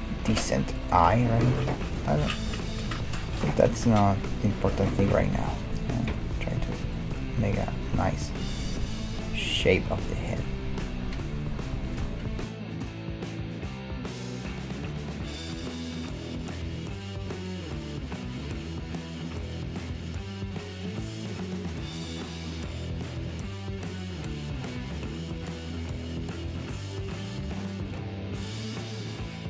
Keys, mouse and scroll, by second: 2.0 Tab, 2.5 Tab, 3.1-10.4 right drag, 3.7 g, 5.4 g, 6.8 g, 8.9 g, 9.9-12.2 middle drag, 12.4 \, 13.7 right click, 14.2-16.0 middle drag, 15.0 g, 16.0-20.6 right drag, 16.2 g, 17.1 g, 19.0-21.2 middle drag, 19.3 g, 21.6-27.5 right drag, 21.9 g, 22.6 g, 23.4 g, 26.2 g, 26.9-29.1 middle drag, 27.3 click, 27.7-29.4 right drag.